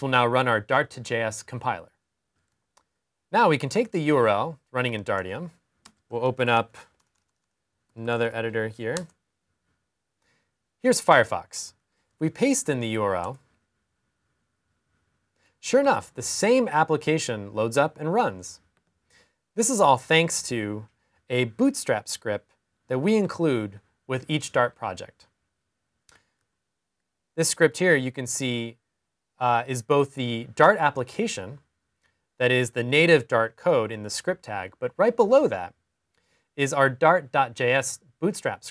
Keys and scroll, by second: 4.5 super+c, 7.6 typing, 11.5 super+v.